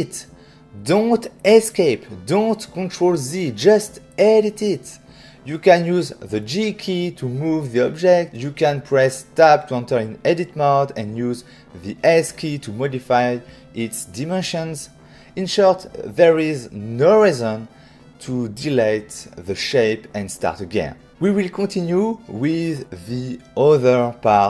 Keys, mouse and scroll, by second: 2.9 shift+middle click, 6.1 g, 6.2 z, 8.2 right click, 8.2 typing, 9.0 Tab, 9.7 typing, 12.6 right click, 13.4 Tab, 14.0 click.